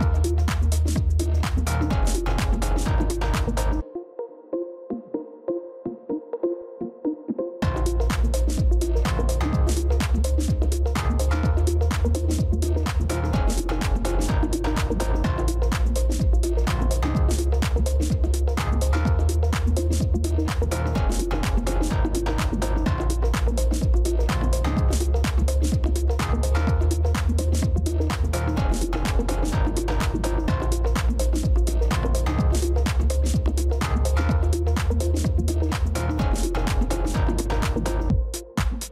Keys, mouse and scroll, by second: 2.1-4.3 scroll up 1, 13.5 double click, 19.2 typing, 25.1 shift+click, 26.8 ctrl+y, 27.7 ctrl+y, 30.1 ctrl+y, 35.8 ctrl+y, 37.4 alt+click.